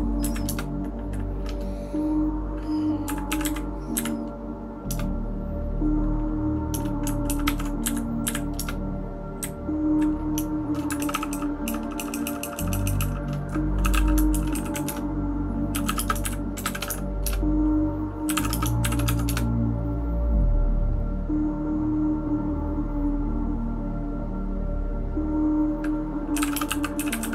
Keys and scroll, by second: 0.2 Down, 0.4 Return, 3.1-3.9 typing, 3.9 Up, 4.9 Return, 7.3 ctrl+w, 7.4 ctrl+w, 7.8 Up, 8.2 Up, 8.6 Return, 9.4 Down, 9.9 Down, 11.0-14.4 typing.